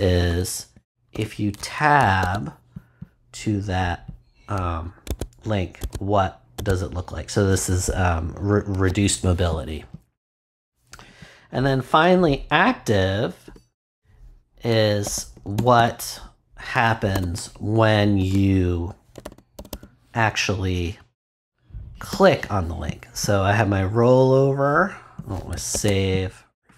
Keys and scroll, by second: 0.2 Return, 0.7 super+Return, 1.1 super+v, 2.2 super+s, 5.0 Tab, 13.4 Return, 14.8-16.0 typing, 17.1-20.0 typing, 22.1 ;, 25.7 super+s.